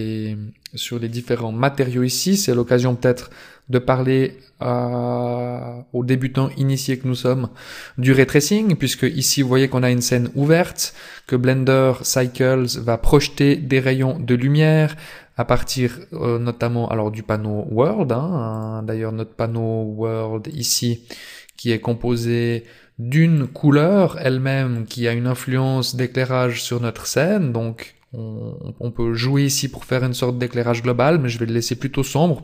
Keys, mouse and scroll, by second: 2.9-3.6 scroll down 1, 3.6-5.6 scroll down 1, 8.5 middle click, 9.1 scroll down 6, 9.7 middle click, 10.7-11.1 scroll down 1, 11.1 middle click, 14.4 scroll up 4, 18.5 click, 20.5 click, 22.4 click, 23.3 click.